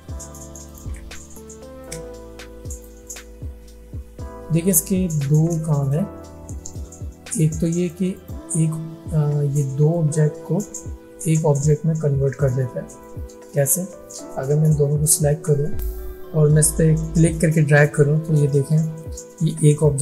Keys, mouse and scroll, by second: 1.9-3.4 alt+drag, 3.5 alt+scroll down 1, 3.8 alt+scroll up 1, 4.2 alt+scroll down 1, 4.7 alt+scroll up 1, 5.7 space, 5.8 click, 6.2 alt+scroll down 1, 6.7-8.1 drag, 9.2 alt+scroll down 1, 10.0-10.9 drag, 12.9 space, 13.0-13.7 click, 13.5 space, 14.4-15.3 drag.